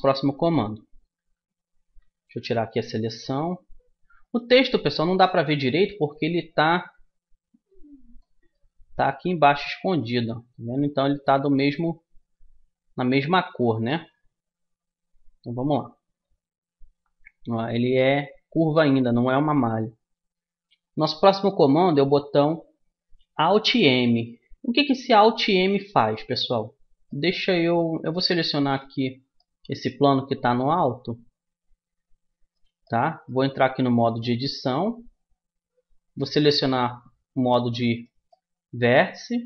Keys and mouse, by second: 0.1 Tab, 2.9-5.1 middle drag, 5.3 middle click, 5.5-6.7 right drag, 5.9 click, 5.9-7.7 middle drag, 7.7-9.5 drag, 9.9 click, 10.5-13.0 right drag, 13.0 middle click, 15.2 middle click, 15.8 click, 16.7-28.9 middle drag, 28.9 click, 29.3 right click, 29.5 middle click, 29.7 click, 29.7-32.1 middle drag, 32.9 middle click, 33.6 Tab, 36.2-37.9 drag, 37.9-39.4 middle drag.